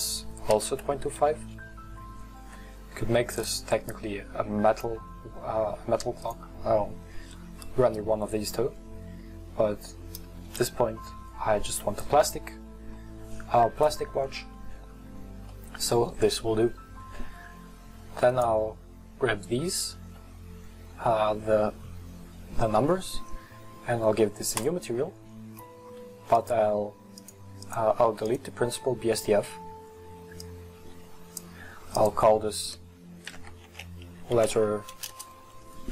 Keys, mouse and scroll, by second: 1.4-10.7 drag, 15.5-16.8 middle drag, 16.8-18.3 scroll up 1, 18.3 right click, 20.1-20.7 scroll down 1, 20.7-24.6 scroll up 1, 24.6-25.2 drag, 28.3 click, 30.8-35.9 drag.